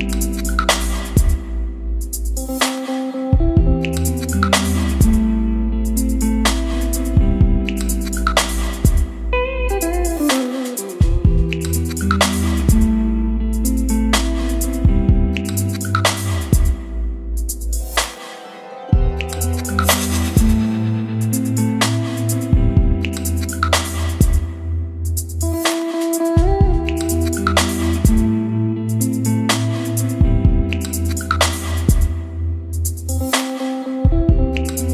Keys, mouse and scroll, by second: 0.0-3.1 typing, 3.5 Down, 4.7 Up, 4.8 Return, 5.5-7.1 typing, 7.2 Return, 8.9-16.8 typing, 13.5 click, 15.6 click, 16.2 Left, 16.3 Return, 18.4-25.1 typing, 19.2 Right, 19.4 Return, 21.4 click, 24.0 click, 24.3 Return, 26.9 b, 27.7 Return, 27.8 v, 28.3 Return, 28.5 c, 29.4 Right, 29.6 Return, 30.0-34.9 typing, 31.8 click, 34.0 click, 34.2 Return.